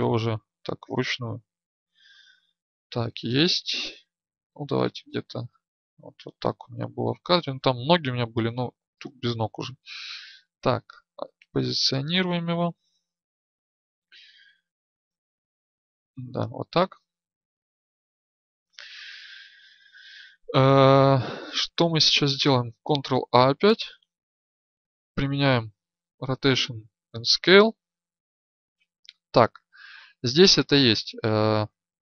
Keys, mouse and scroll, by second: 11.2-20.2 drag, 31.9 click.